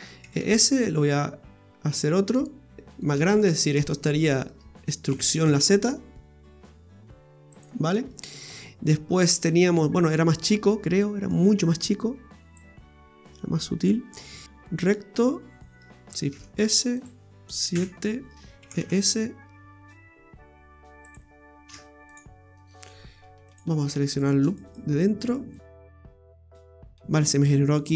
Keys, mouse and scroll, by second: 0.2 e, 2.7 click, 3.0 right click, 3.3 alt+shift+right click, 3.5 right click, 4.0 middle click, 5.1 e, 7.9 scroll down 1, 8.1 middle click, 8.7 scroll up 2, 9.1 scroll down 2, 9.7 middle click, 10.3 middle click, 10.8 scroll up 2, 11.3 shift+middle click, 12.6 click, 14.1-14.4 scroll down 4, 14.9 middle click, 16.3 shift+s, 17.7 KP_7, 18.3 scroll up 4, 18.7 e, 21.7 ctrl+z, 22.1 click, 23.5 click, 24.2 right click, 24.5 alt+shift+right click, 24.7 right click, 25.2 alt+shift+right click, 25.5 alt+shift+right click, 26.1 alt+shift+right click, 27.7 click.